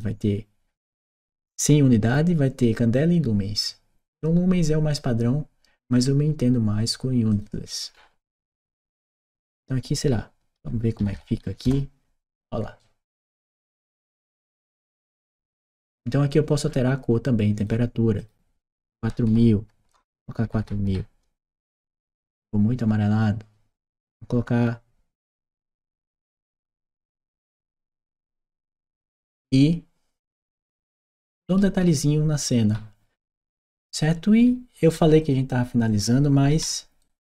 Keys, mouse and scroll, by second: 7.1 click, 7.7 middle click, 9.2 click, 12.6 right click, 17.4 click, 18.0 click, 18.8-20.3 typing, 21.2 Return, 25.1-26.4 typing, 26.5 Return, 27.5 click, 27.9-35.0 right drag, 28.7 a, 29.1 s, 31.0 w, 31.5 s, 33.2 w, 34.3 s, 35.0 click, 36.8 right click.